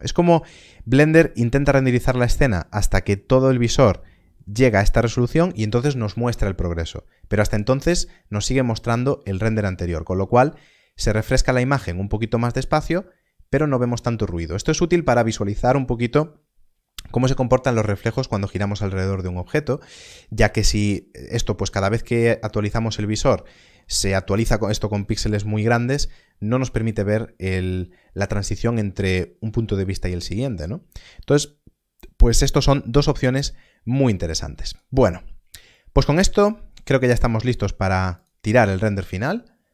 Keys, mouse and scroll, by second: 9.7 middle click, 34.6 middle click, 36.2 click, 37.4 click, 39.1 shift+middle click.